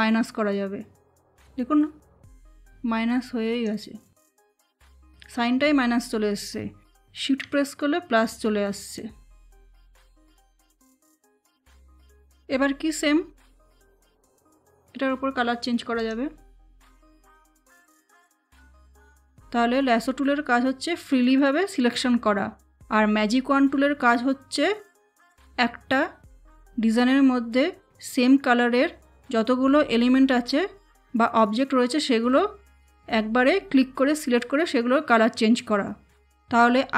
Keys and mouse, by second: 10.9 click, 14.0 click.